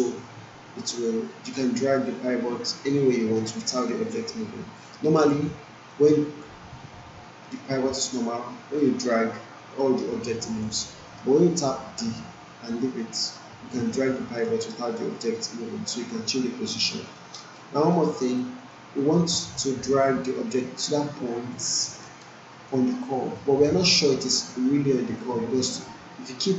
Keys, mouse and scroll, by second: 1.5-5.0 drag, 5.5-6.1 alt+right click, 6.4 d, 7.2-7.8 alt+middle click, 8.7-10.6 drag, 11.2 ctrl+z, 12.0 d, 13.8-17.0 drag, 17.1 alt+middle click, 17.5-18.4 alt+right click, 18.0 alt+middle click, 18.4-19.2 alt+right click, 18.9 alt+middle click, 19.8-21.8 drag, 21.8 alt+middle click, 22.1-22.7 alt+right drag, 25.0-26.5 drag.